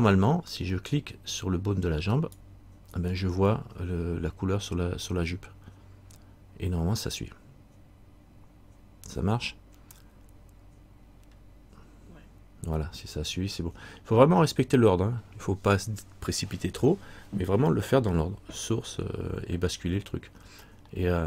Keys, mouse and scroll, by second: 0.4-2.3 scroll up 1, 2.3 right click, 11.2-14.5 scroll up 1, 14.7 scroll up 1, 21.1-21.2 scroll down 1.